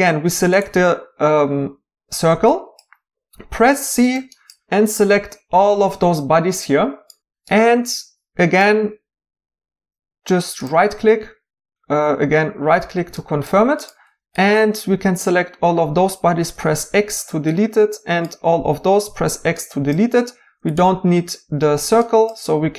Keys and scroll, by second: 3.6 c, 16.4 x, 19.0 x, 21.5 x.